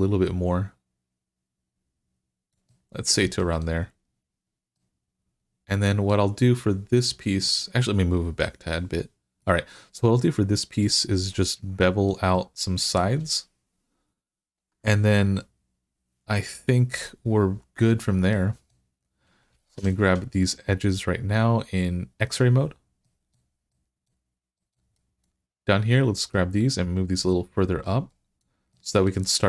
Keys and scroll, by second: 19.6 2.